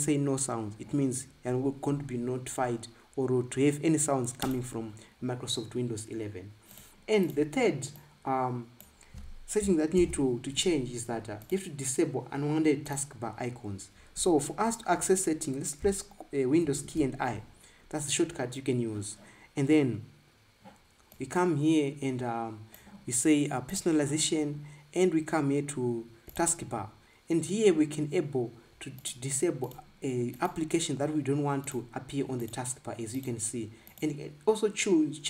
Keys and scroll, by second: 10.8 ctrl+b, 17.4 super+i.